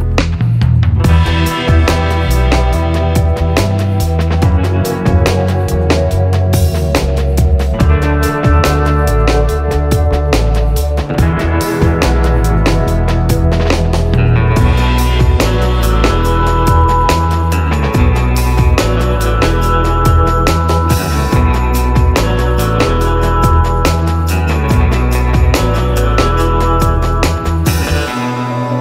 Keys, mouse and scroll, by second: 5.2 shift+click, 12.1 click, 13.7-22.6 shift+drag, 25.3-26.1 scroll up 1, 27.0-28.8 drag.